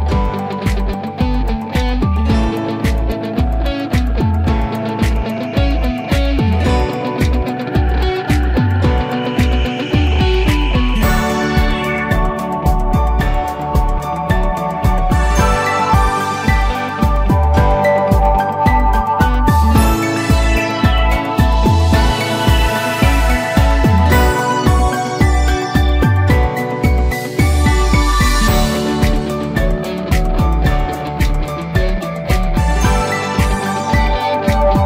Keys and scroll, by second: 18.0 ctrl+z.